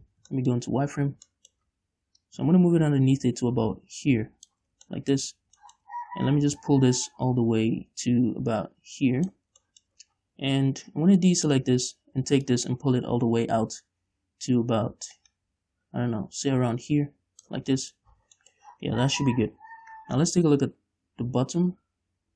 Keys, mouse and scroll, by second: 0.4 z, 0.8-2.6 shift+middle drag, 1.1-1.7 scroll up 2, 2.6-5.3 drag, 5.2 scroll down 2, 5.3-7.0 shift+middle drag, 7.0-10.1 drag, 9.9 scroll down 2, 10.1-11.2 shift+middle drag, 10.8-11.1 scroll down 2, 11.1 scroll up 2, 11.6 ctrl+click, 12.9-18.0 drag, 18.0 scroll down 2, 18.2 middle click, 18.5 z, 18.7 middle click, 19.1-19.8 scroll up 2, 19.8 KP_5, 20.8-22.3 middle drag.